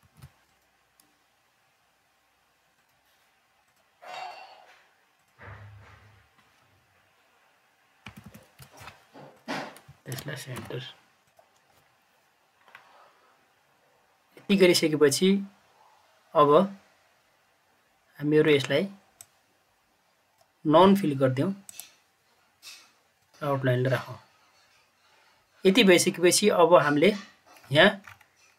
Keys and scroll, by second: 0.0 ctrl+z, 7.9 ctrl+z, 8.0 ctrl+Page_Up, 8.1 ctrl+Page_Up, 10.5 c.